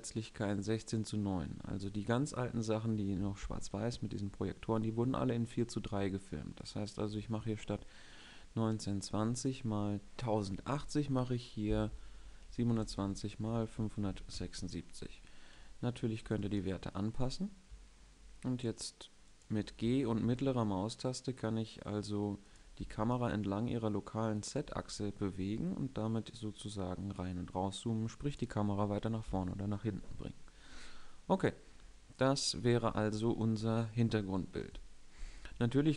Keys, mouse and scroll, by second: 6.2-8.2 drag, 15.9 g, 19.9 g, 22.4 g, 24.4 g.